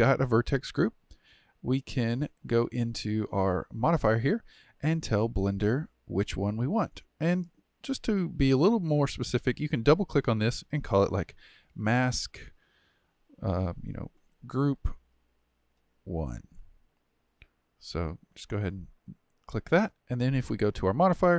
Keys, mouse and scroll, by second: 2.0 click, 7.3 click, 9.4 click, 9.6-12.7 drag, 20.4 click.